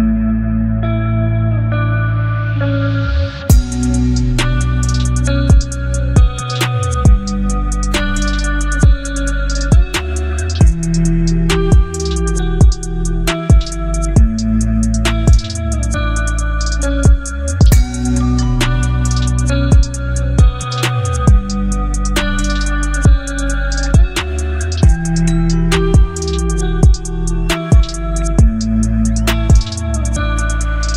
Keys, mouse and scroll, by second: 3.9 ctrl+click, 6.5 ctrl+shift+i, 7.2 b, 9.0-9.7 drag, 11.3 ctrl+z, 14.2-15.7 drag, 18.8 alt+scroll up 1, 19.4 space, 19.5-20.4 click, 19.9 space, 20.9-21.8 drag, 27.0 ctrl+d, 28.3 b.